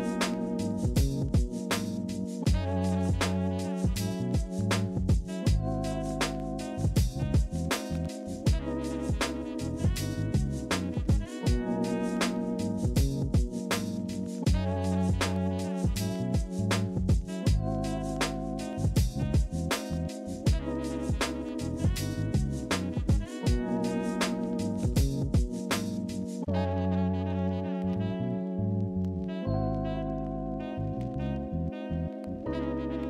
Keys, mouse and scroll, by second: 10.1 ctrl+z, 18.0 ctrl+z, 18.7 ctrl+c, 18.9 ctrl+f, 21.2 alt+click, 25.5 ctrl+z.